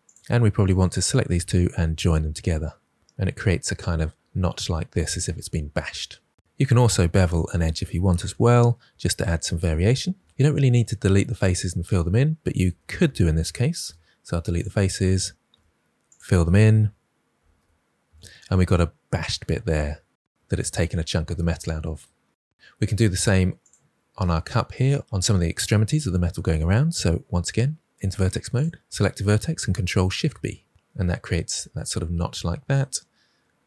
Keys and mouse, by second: 0.0 click, 1.7 j, 4.3 Tab, 7.7 2, 8.0 Tab, 8.4 2, 8.5 click, 8.9 ctrl+b, 9.9 Tab, 12.6 Tab, 13.7 Delete, 15.4 2, 17.3 f, 17.5 f, 18.0 Tab, 23.5 click, 24.1 Tab, 27.9 1, 29.5 ctrl+b, 30.8 Tab.